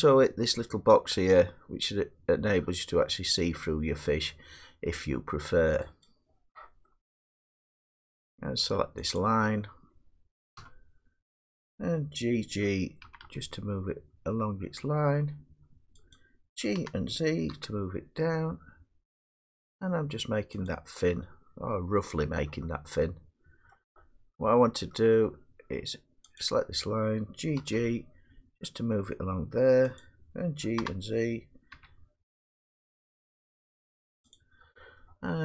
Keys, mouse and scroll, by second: 1.6-7.2 drag, 7.7 middle click, 9.6 click, 10.6 1, 13.0 g, 13.2 g, 16.2 click, 16.8 g, 17.5 z, 20.7 click, 21.5-23.7 drag, 23.7-24.5 middle drag, 24.3 scroll, 24.8 middle click, 27.6 click, 27.6 g, 27.7 g, 30.0 click, 30.8 g, 31.7 z, 34.4 click.